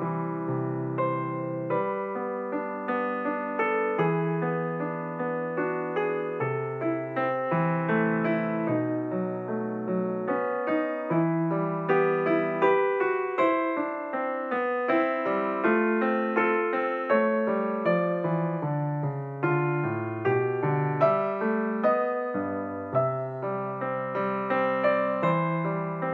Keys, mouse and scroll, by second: 0.8 click, 1.6 KP_7, 3.2-4.3 scroll up 4, 4.3-5.0 scroll up 2, 5.0 click, 5.8 Tab, 8.7 click, 10.7 ctrl+r, 13.2 click, 14.9 click, 18.7 click, 19.9 click, 21.7-22.0 scroll down 1, 22.0 g.